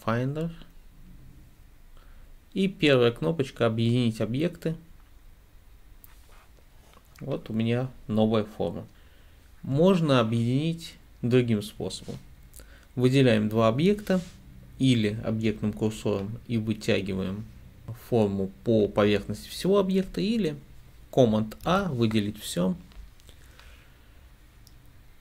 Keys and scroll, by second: 21.7 super+a.